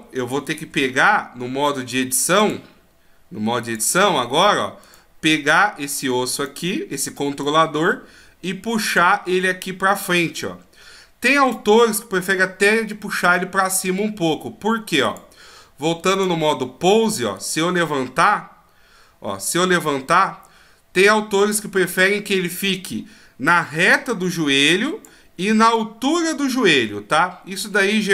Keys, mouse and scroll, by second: 0.3 alt+g, 3.8 click, 4.9 right click, 5.9 right click, 6.4 right click, 7.5 click, 15.0 click, 16.3 click, 17.4 right click, 18.3 click, 23.6 d, 23.9 click, 25.1-25.7 d, 26.8 click, 26.8 d.